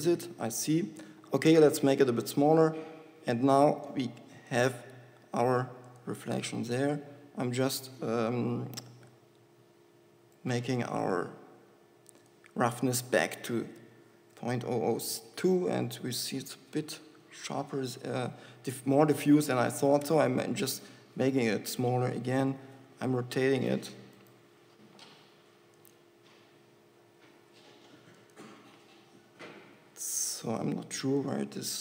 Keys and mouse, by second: 0.2 g, 1.3 s, 4.0 g, 5.4 g, 22.8 r, 24.6 click, 25.1 r, 27.3 r, 30.1 r.